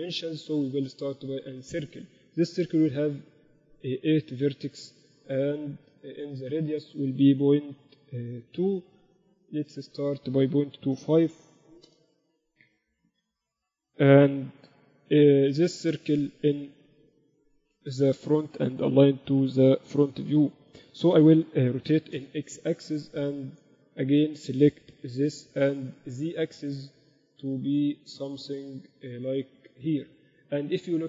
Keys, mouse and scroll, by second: 0.7 shift+a, 3.2 F6, 13.7 KP_1, 14.1 KP_1, 21.6 r, 23.7 Tab, 24.0 a, 25.5 e.